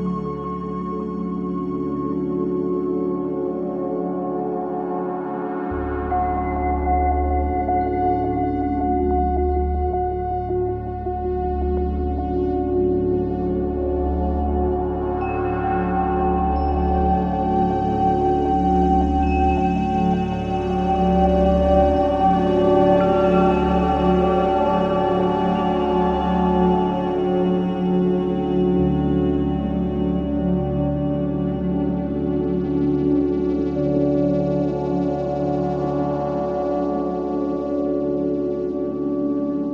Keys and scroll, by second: 1.3 Delete, 10.1 Delete, 12.6 F9, 14.0 4, 15.4 1, 20.3 shift+i, 21.8 5, 25.8 ctrl+z, 32.3 4, 32.8 shift+i, 37.0 2, 39.0 Escape.